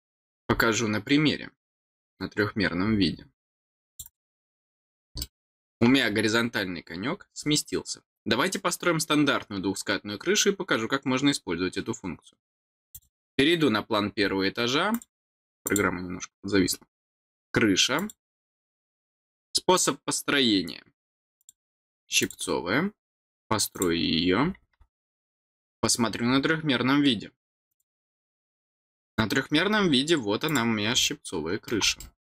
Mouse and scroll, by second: 2.5-3.1 scroll down 2, 3.1 scroll up 1, 3.9 click, 5.2 middle click, 6.0 scroll down 2, 7.1 scroll down 2, 7.4 scroll up 2, 12.9 click, 13.0 click, 13.9 scroll down 2, 14.9 click, 15.6 click, 17.9 click, 21.4 click, 22.2 click, 23.7 click, 26.0-26.5 scroll down 2, 27.5 click, 27.7 click, 28.5 scroll up 1, 28.5 scroll down 1, 28.8 middle click, 29.5 scroll down 4, 30.4 click, 31.0 middle click, 32.0 middle click.